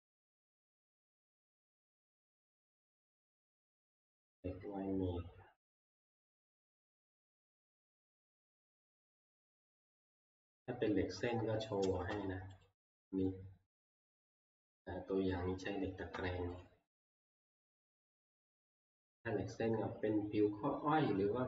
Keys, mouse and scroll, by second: 0.0 click, 3.3 click, 6.1 click, 7.4 middle click, 7.4 middle click, 7.5 middle click, 9.0 click, 9.3 click, 9.4-9.9 scroll, 9.9 click, 10.8 scroll, 11.7 scroll, 12.4 middle click, 12.7 click, 15.2 click, 16.6 click.